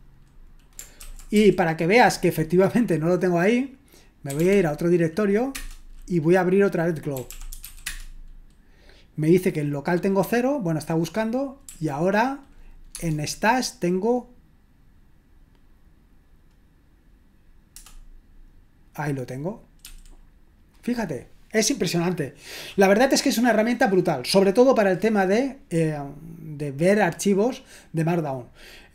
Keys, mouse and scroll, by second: 1.0-1.4 typing, 4.3-8.1 typing, 11.6 typing, 17.7 Return, 19.8 typing.